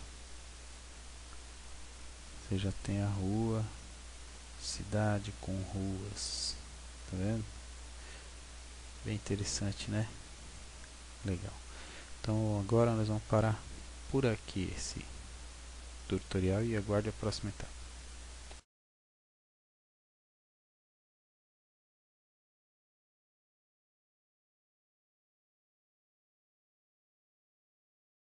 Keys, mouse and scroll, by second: 1.1-1.7 scroll up 6, 2.1-2.5 scroll up 1, 2.5 middle click, 11.9-13.1 scroll down 3, 13.1-16.3 scroll down 6, 16.3 scroll down 1.